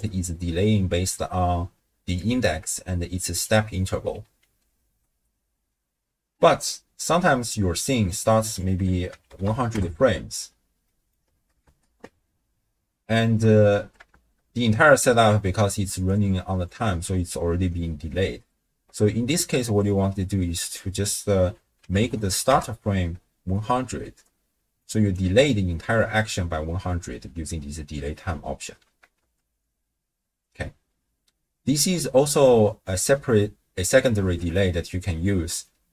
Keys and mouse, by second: 1.1-3.8 d, 2.3-3.5 drag, 4.7 space, 6.5 space, 7.7 middle click, 8.5-9.8 drag, 9.4 0, 10.9 middle click, 11.6 shift+space, 13.2 space, 13.8 space, 15.7 d, 16.2 click, 16.7 d, 16.7 d, 17.2 d, 20.8-22.6 drag, 22.1 0, 24.5 d, 25.0 click, 25.1 d, 25.8 d, 27.1 space, 29.2 shift+space, 30.8 space, 32.7 click, 34.2 shift+space, 35.3 space.